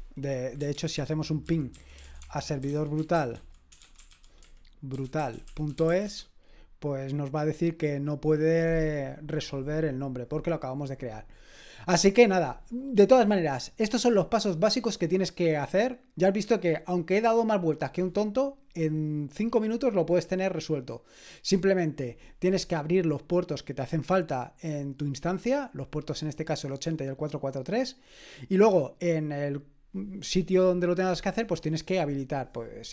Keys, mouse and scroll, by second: 0.8 ctrl+c, 1.2-6.5 typing.